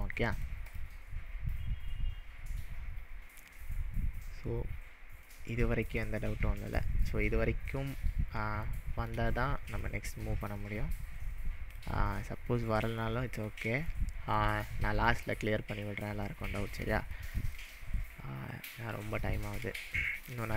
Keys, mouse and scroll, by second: 0.1-0.6 middle drag, 0.7 click, 1.9-2.9 scroll up 4, 5.3-6.1 middle drag, 8.1 scroll down 2, 8.7-9.2 shift+middle drag, 9.7 click, 10.2-11.7 drag, 13.1-13.5 middle drag, 17.2-17.7 shift+middle drag.